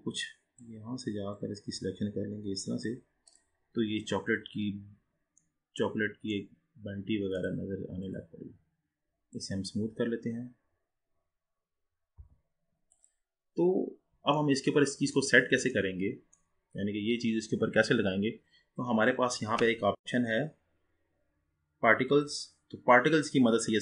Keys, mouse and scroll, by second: 3.4-3.8 drag, 3.8-4.9 scroll up 3, 4.9-5.6 scroll down 2, 5.6-6.7 middle drag, 6.7-7.4 scroll up 3, 7.4 click, 8.1-11.2 right drag, 12.3 g, 13.6-13.9 scroll down 4, 14.6-19.0 middle drag, 22.2-23.8 drag.